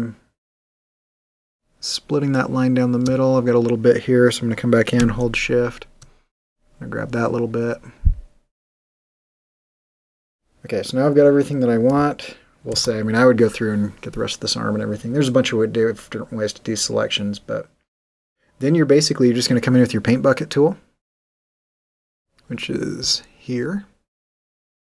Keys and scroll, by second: 12.7 super+0, 22.1 g.